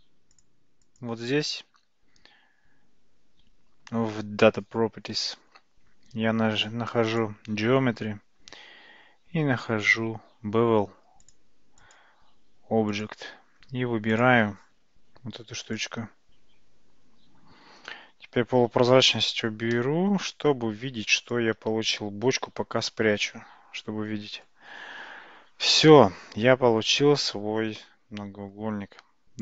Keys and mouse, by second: 0.3 click, 0.9 click, 7.2 click, 11.8 click, 12.9 click, 14.3 click, 18.7 alt+z, 19.8-21.1 middle drag, 22.5 h, 23.3-24.5 middle drag, 25.9-28.6 middle drag.